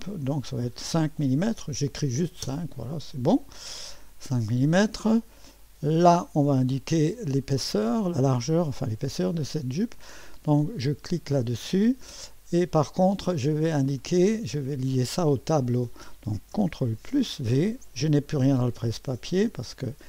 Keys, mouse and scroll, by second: 0.6 5, 2.4 Return, 4.3-6.4 drag, 11.1 click, 14.0 click, 17.0 ctrl+v, 19.7 click.